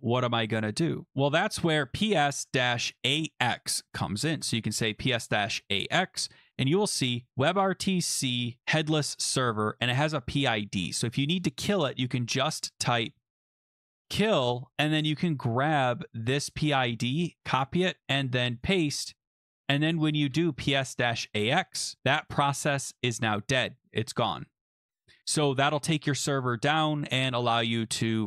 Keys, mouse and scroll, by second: 0.6-1.0 scroll up 1, 1.1 click, 1.5-3.6 typing, 4.4 Return, 8.6 click, 9.7 click, 9.9 click, 11.8 Caps_Lock, 12.8-14.7 typing, 15.9-17.9 typing, 16.1 click, 16.2 click, 16.5 middle click, 16.6 right click, 16.7 middle click, 17.4 right click, 17.4 click, 17.4 middle click, 17.8 right click, 18.6 click, 19.2 Return, 20.3 shift+Return, 21.3 Up.